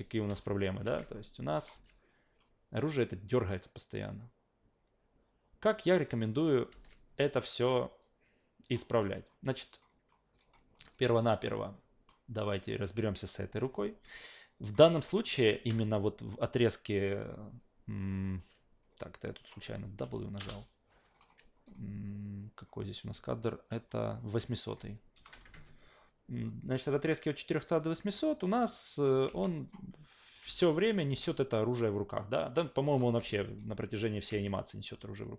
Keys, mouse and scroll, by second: 0.1 click, 0.3 alt+v, 1.6 click, 1.8 alt+v, 5.9 alt+middle click, 6.2 alt+right click, 6.7 alt+v, 7.2-8.7 drag, 9.1 alt+middle click, 9.5 alt+right click, 9.9 alt+middle click, 10.3 alt+right click, 10.6 alt+middle click, 10.9 alt+right click, 12.6 click, 14.3 alt+right click, 14.8 alt+middle click, 18.2 alt+middle click, 18.9 click, 19.4 click, 20.0 BackSpace, 20.4 Return, 21.1 alt+middle click, 21.6 click, 22.5 click, 23.6 click, 24.6 click, 26.5-29.0 drag, 29.3 alt+v, 29.5 alt+right click, 30.4 alt+v, 31.1 alt+v, 31.3-32.5 drag, 32.7 alt+right click, 33.0 alt+middle click, 33.2 alt+v, 33.4 alt+right click, 33.6 alt+middle click, 34.3 alt+v, 34.5-35.3 drag.